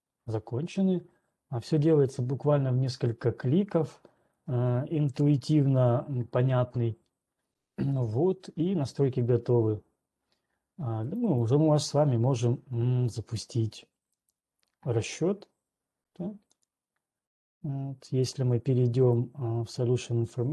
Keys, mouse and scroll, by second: 4.3 right click, 5.0 ctrl+1, 5.5 click, 11.5 right click, 12.0 right click, 14.8 click, 19.3 click.